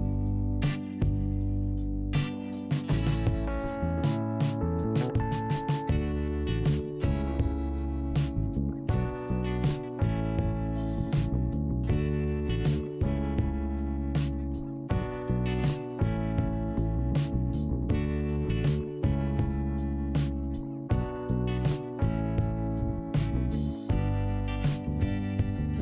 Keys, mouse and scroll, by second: 0.5 click, 3.6 click, 4.5 click, 7.8-8.3 scroll down 2, 9.1 click, 10.3 click, 12.5 click, 15.9 click, 16.0 click, 16.8 click, 17.6 click, 18.7 click, 20.4-21.1 scroll up 1, 21.1 click, 22.5 click.